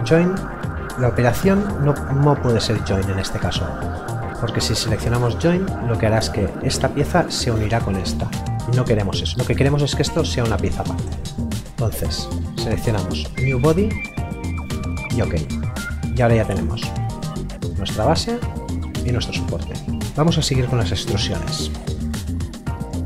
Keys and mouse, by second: 11.2 click, 20.0 middle click, 22.8 click.